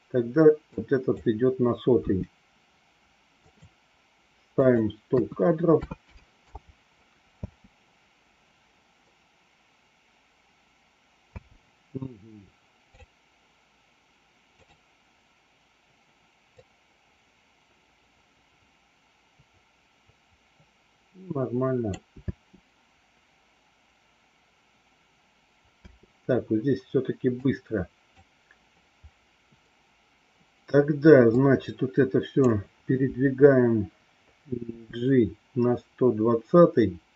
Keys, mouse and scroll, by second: 0.7 click, 1.9 g, 4.5-6.5 drag, 5.9 KP_0, 7.2 space, 11.3 space, 14.4 click, 16.4-21.9 drag, 22.1 space, 25.6 space, 27.4 click, 31.4 click, 34.7 g.